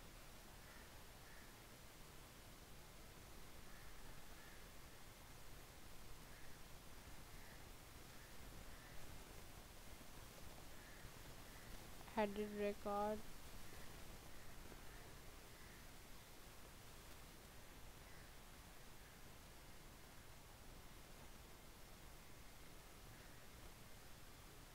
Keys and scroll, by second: 8.0 shift+Caps_Lock, 8.4-12.0 typing.